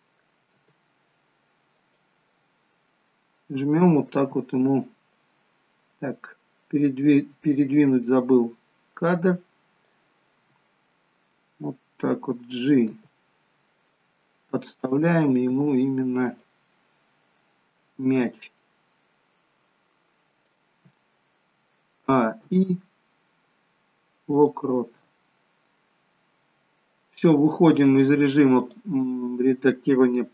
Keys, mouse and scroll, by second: 0.6 g, 2.2 middle click, 7.4 click, 11.2 middle click, 12.9 g, 14.1 middle click, 15.5 g, 16.7 middle click, 18.1 g, 22.1 a, 22.4 i, 25.3-25.8 scroll down 3, 25.8 middle click, 26.7-27.3 scroll up 1, 28.0 click, 29.7-30.3 scroll up 2.